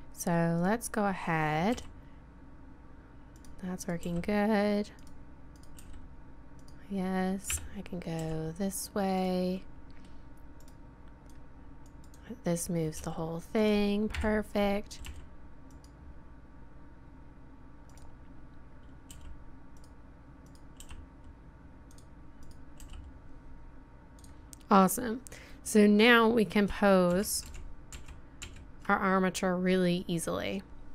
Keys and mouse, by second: 0.6-2.9 drag, 1.7 r, 3.8-4.2 drag, 4.0 r, 5.7 r, 7.4 KP_7, 8.2 r, 10.6-11.0 middle drag, 11.3-12.2 drag, 11.3-12.0 right drag, 13.0 g, 14.1 KP_1, 15.0 r, 17.9-19.7 drag, 19.1 r, 20.4-24.3 drag, 20.8 r, 22.8 r, 24.3 middle drag, 27.2 ctrl+z, 27.5 ctrl+z, 28.0 ctrl+z, 28.5 ctrl+z.